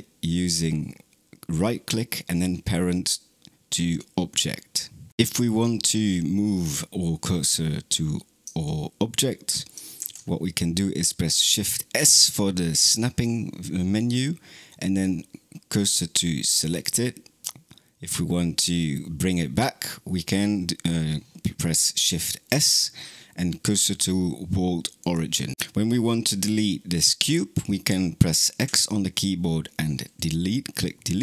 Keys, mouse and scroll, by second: 9.8 shift+s, 22.3 shift+s.